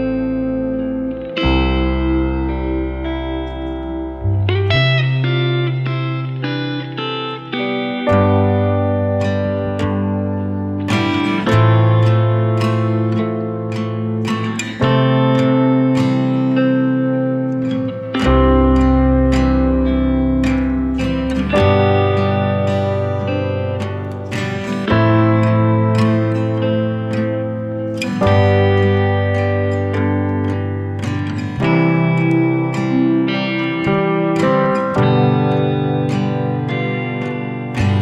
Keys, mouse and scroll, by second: 1.3-2.7 drag, 2.7 ctrl+z, 3.7-10.9 drag, 10.9 ctrl+z, 11.9-14.7 drag, 14.7 Escape, 15.3 scroll down 1, 15.8 scroll up 1, 17.1 click, 17.6 scroll up 1, 18.1 click, 18.7 scroll up 1, 21.6 scroll up 1, 21.7-23.1 drag, 23.1 scroll down 1, 24.4-24.9 scroll up 1, 24.9 click, 25.3 scroll up 1, 26.3 click, 27.5 ctrl+z, 28.5-30.9 drag, 30.9 scroll down 1, 32.7 click, 32.9 scroll down 1, 34.7-35.1 scroll up 1, 35.3-38.0 drag.